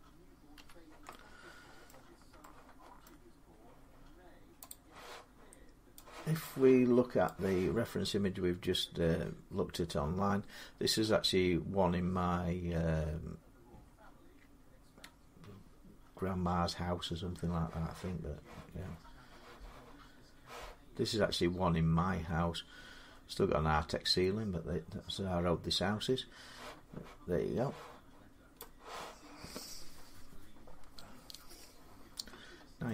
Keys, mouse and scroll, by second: 0.3 h, 1.7 middle click, 2.8 shift+middle click, 4.5 click, 6.2 click, 28.4-32.9 drag.